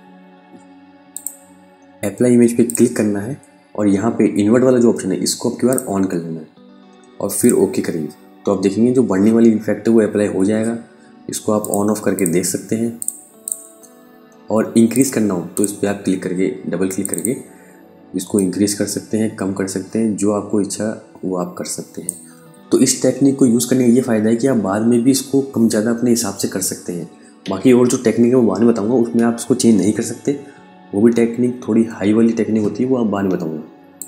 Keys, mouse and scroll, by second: 0.6 click, 5.1 click, 11.0 click, 33.4 click.